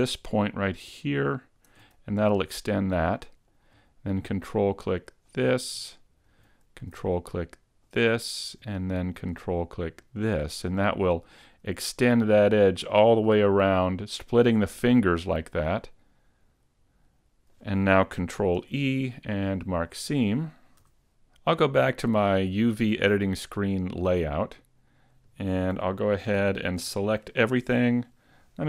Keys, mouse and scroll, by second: 1.1 ctrl+right click, 2.1 middle click, 5.3 ctrl+right click, 5.9 middle click, 7.9 ctrl+right click, 10.1 ctrl+right click, 10.9 middle click, 15.7 middle click, 18.6 ctrl+e, 20.9 a, 21.3 middle click, 22.4 click, 25.7 z, 26.4 z, 26.8 a.